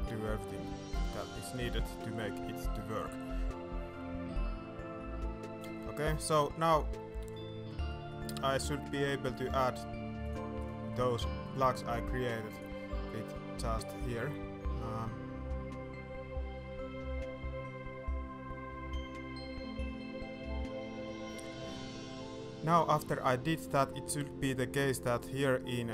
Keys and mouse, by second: 7.1 shift+middle click, 7.8 middle drag, 8.2 shift+middle drag, 8.8 shift+middle click, 9.3 middle click, 10.5 middle click, 10.9 shift+middle drag, 11.4 middle click, 12.6-17.0 middle drag, 17.0-21.2 right drag, 25.3-25.9 middle drag.